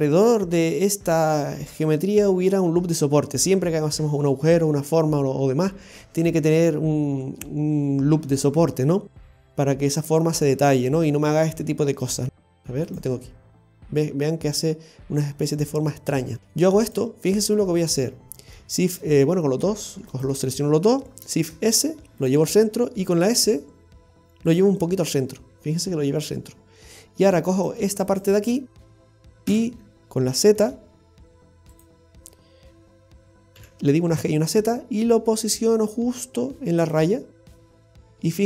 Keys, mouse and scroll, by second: 10.2-10.6 scroll down 1, 10.7 shift+middle click, 12.9 click, 16.4 ctrl+r, 17.2 middle click, 19.4 middle click, 21.2 alt+shift+right click, 21.4 shift+s, 23.1 s, 26.6 middle click, 27.6 right click, 28.0 alt+shift+right click, 28.2 alt+shift+right click, 29.5 KP_3, 30.6 z, 37.5 middle click.